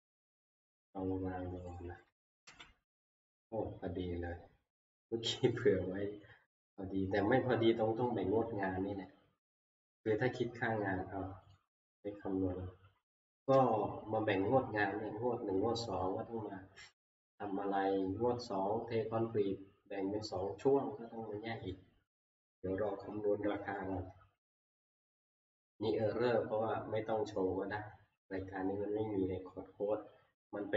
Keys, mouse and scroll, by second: 1.7 click, 2.5 ctrl+v, 5.5 click, 8.4 click, 10.1 click, 11.5 click.